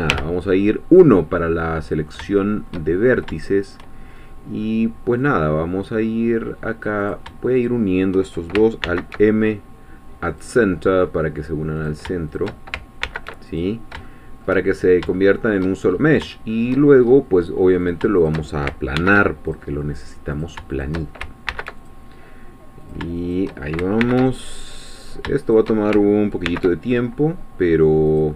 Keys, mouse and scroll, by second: 0.1 1, 1.6 middle click, 2.4 shift+middle click, 3.0-3.4 shift+scroll up 4, 3.4 shift+middle click, 4.1-4.4 shift+scroll up 1, 5.3-7.3 drag, 7.7 shift+click, 8.8 alt+m, 10.3-12.0 drag, 12.4 shift+click, 13.0 alt+m, 13.5 alt+click, 14.1 shift+middle click, 14.6-15.1 shift+scroll down 2, 15.2 shift+middle click, 15.9-16.2 shift+scroll up 1, 16.3 shift+middle click, 17.0-17.8 shift+scroll up 1, 17.8 shift+click, 18.3 shift+click, 19.0 alt+m, 19.5 alt+click, 20.3 click, 20.8 shift+click, 21.5 alt+m, 21.8 alt+click, 22.8 shift+click, 23.3 shift+click, 24.0 alt+m, 24.4 alt+click, 25.0 click, 25.6 shift+click, 26.4 alt+m, 28.1 click.